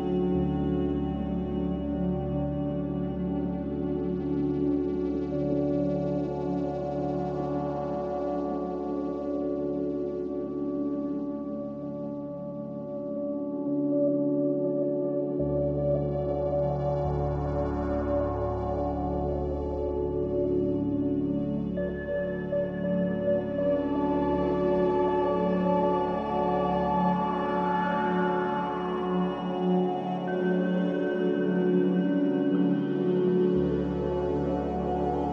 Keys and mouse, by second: 0.3 middle click, 3.6 shift+click, 4.9 s, 6.9-8.1 drag, 9.0 shift+middle click, 11.1 click, 13.2 shift+click, 13.9 s, 17.3-17.7 middle drag, 18.3 shift+middle click, 20.1 ctrl+z, 21.1 middle click, 23.0 m, 25.0 shift+click, 28.0 click, 30.2 m, 32.8-35.3 drag.